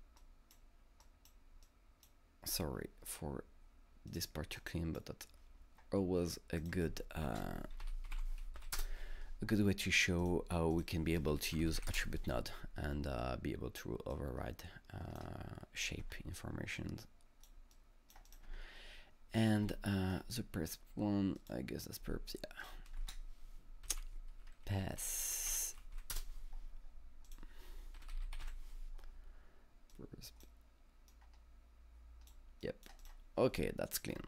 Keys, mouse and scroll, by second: 0.2-1.6 drag, 1.6-4.6 drag, 4.6-7.7 drag, 7.3 ctrl+space, 7.5-8.7 typing, 7.9 click, 8.7 Return, 10.2 click, 10.7 click, 11.1-12.3 typing, 14.1-18.3 drag, 16.0 space, 18.3-19.7 drag, 18.5 space, 19.7-22.6 alt+middle drag, 21.4 click, 22.6 click, 22.6 alt+middle click, 23.0 ctrl+space, 23.6-26.0 typing, 26.1 Return, 27.3 click, 27.7-29.0 typing, 29.9-32.6 drag, 33.0 click, 33.0-34.2 drag, 34.1-34.2 scroll down 3.